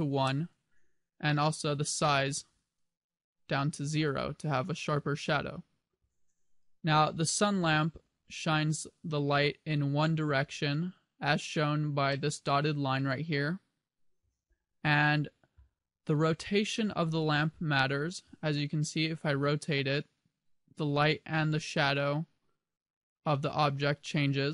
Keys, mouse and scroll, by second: 2.1 click, 7.1 g, 8.7 click, 9.1 middle click, 14.5 KP_7, 15.9-16.7 scroll down 3, 17.6 scroll down 1, 18.1 r.